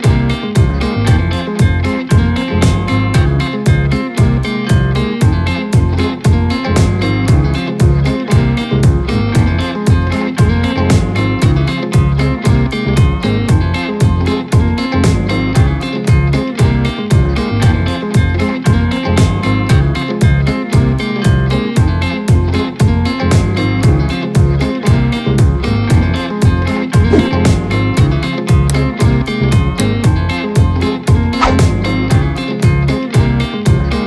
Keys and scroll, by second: 0.5 space, 5.2 space, 7.1 space, 8.9 ctrl+z, 10.4 space, 22.2 ctrl+KP_Subtract, 22.2 ctrl+KP_Subtract, 22.6 ctrl+KP_Subtract, 23.0 ctrl+KP_Subtract, 25.7 ctrl+KP_Add, 26.2 ctrl+KP_Add, 26.5 ctrl+space, 30.6 ctrl+KP_Subtract, 32.6 ctrl+KP_Subtract.